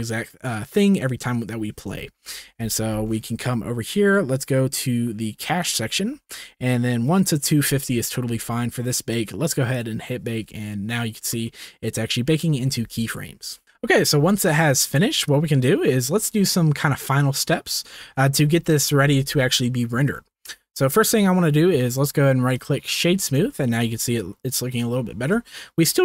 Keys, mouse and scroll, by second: 2.5 ctrl+s, 5.6 click, 13.6 ctrl+s, 15.2-16.0 drag, 20.3 ctrl+s, 21.1-21.8 drag, 22.0 click, 23.5 shift+middle click, 25.5 shift+middle drag.